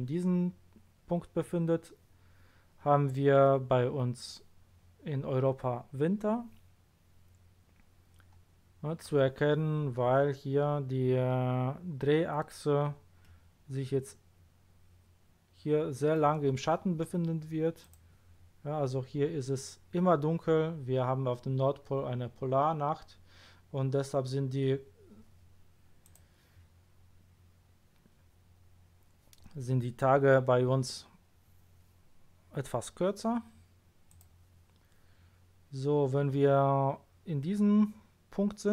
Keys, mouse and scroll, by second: 8.3-8.6 scroll up 1, 13.2-14.7 middle drag, 17.8 click, 26.0 click, 34.1 click.